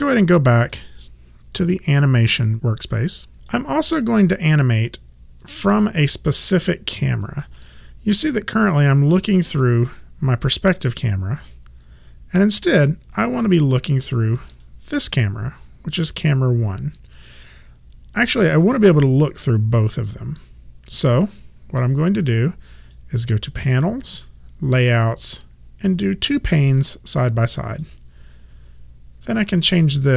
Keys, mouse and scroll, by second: 0.7 click, 5.6 alt+right click, 14.6 click, 21.0 click, 29.7 click.